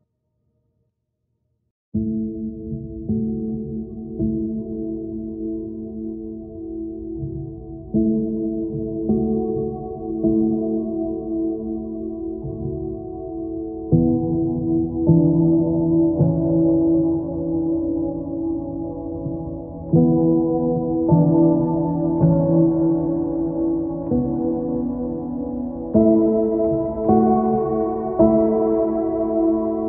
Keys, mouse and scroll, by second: 4.6 right click, 5.4 right click, 5.8 click, 6.2 right click.